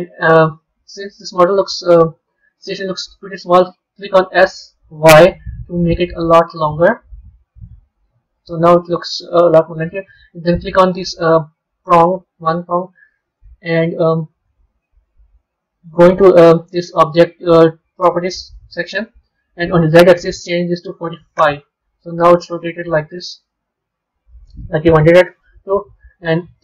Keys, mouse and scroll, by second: 0.4-2.1 middle drag, 2.1 Tab, 2.5 click, 4.1 s, 7.8-8.8 scroll down 2, 8.8-9.9 scroll up 2, 9.9 click, 13.8 click, 14.8 click, 19.7-22.6 drag, 22.6-25.2 middle drag, 25.2 KP_3.